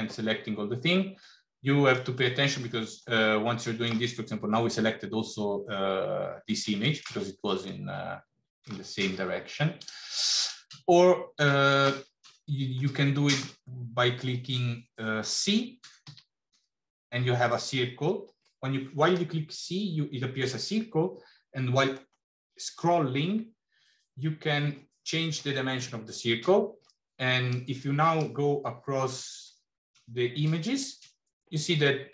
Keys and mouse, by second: 1.1 middle click, 3.3 middle click, 6.8 middle click, 7.6 middle click, 9.6 click, 11.4 shift+middle click, 12.8 shift+middle click, 16.0 c.